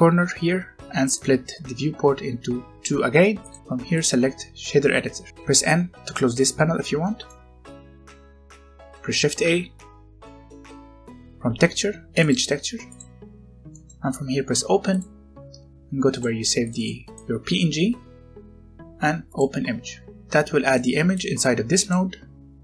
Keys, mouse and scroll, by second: 1.1 click, 5.3 n, 6.3-7.0 scroll up 1, 7.0 middle click, 7.4 scroll up 1, 7.6 middle click, 8.0 scroll up 1, 8.5 middle click, 10.2 shift+a, 12.2 click, 13.1 scroll up 1, 13.6 middle click, 14.0 scroll up 1, 14.8 click, 20.1-20.7 scroll up 1, 20.7 middle click, 21.1 click.